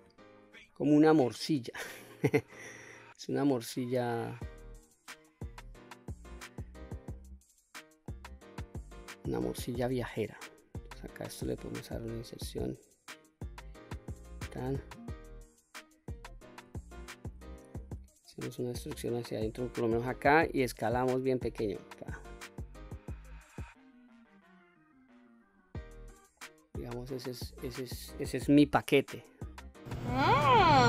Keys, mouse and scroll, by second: 0.0 i, 1.4 click, 2.1 middle click, 3.0-4.3 drag, 4.8 middle click, 5.5-5.9 scroll down 1, 5.9-7.0 middle drag, 7.0-7.5 scroll down 1, 7.5 middle click, 8.1-8.4 scroll down 1, 8.4 scroll up 2, 9.2 click, 9.9 middle click, 11.3 i, 13.2 click, 13.6 middle click, 14.9 middle click, 16.3-16.7 shift+middle drag, 17.8 e, 19.1 click, 19.4-19.9 middle drag, 20.3 s, 22.4 click, 22.9 middle click, 23.8-24.8 drag, 25.1-25.4 scroll down 1, 25.4 middle click, 26.3 scroll down 1, 26.6 middle click, 29.1-29.5 scroll down 1, 29.5 middle click.